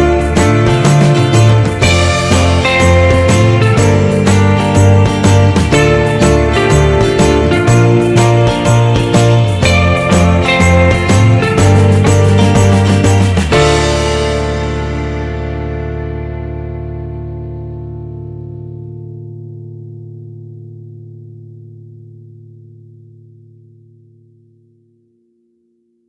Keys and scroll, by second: 8.0 Return.